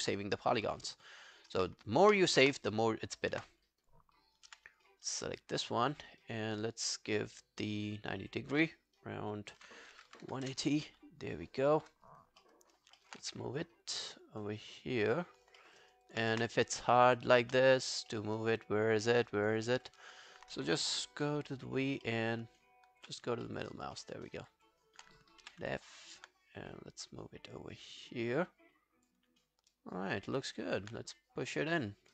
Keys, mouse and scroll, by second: 2.4 space, 3.4 space, 5.0 scroll up 2, 5.3 scroll down 3, 6.0 scroll up 1, 9.4-10.8 typing, 12.4 alt+middle click, 12.7 alt+scroll up 1, 13.0 alt+middle click, 13.3 w, 15.6 alt+middle click, 15.8 alt+right click, 16.1 alt+click, 16.4 space, 17.5 space, 18.1 alt+middle click, 18.6 alt+click, 19.1 alt+middle click, 19.3 alt+right click, 19.7 alt+middle click, 20.0-20.6 alt+scroll up 1, 21.6-23.0 v, 23.3 scroll up 1, 23.5 alt+middle click, 23.7 alt+right click, 24.0 alt+middle click, 24.3 alt+right click, 24.5 alt+click, 25.5 f, 25.8 scroll down 1, 26.0 alt+click, 29.5 alt+scroll down 1, 29.7 alt+click, 30.3 alt+middle click, 30.5 alt+right click.